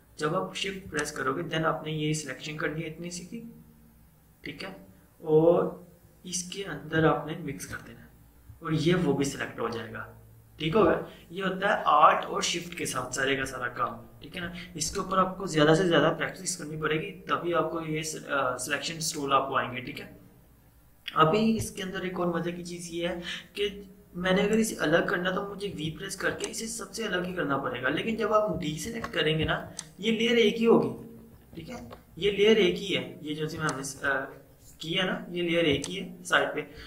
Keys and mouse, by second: 1.0-10.4 shift+drag, 25.8 v, 26.4-29.0 drag, 29.0 ctrl+d, 29.7-31.9 drag, 31.9 ctrl+0, 33.5 click, 33.7-36.8 drag.